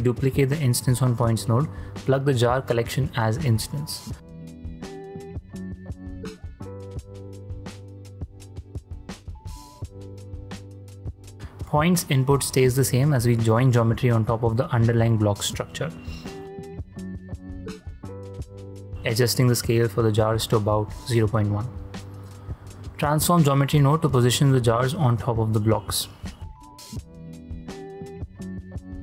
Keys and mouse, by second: 0.1 click, 1.4-1.9 middle drag, 2.2-2.8 ctrl+middle drag, 3.0 shift+middle click, 4.2 click, 5.0 drag, 5.5 ctrl+drag, 5.7-8.5 drag, 9.2-10.3 drag, 10.7 middle click, 11.8-12.7 drag, 13.2 ctrl+shift+click, 15.1 shift+click, 15.5-15.9 ctrl+drag, 16.1-16.5 drag, 16.6 shift+space, 18.3 shift+space, 18.9 click, 20.5 click, 21.2 click, 21.9 ctrl+x, 21.9 shift+a, 23.4 click, 24.5-26.3 shift+drag, 26.7 shift+drag, 27.1-28.7 shift+drag.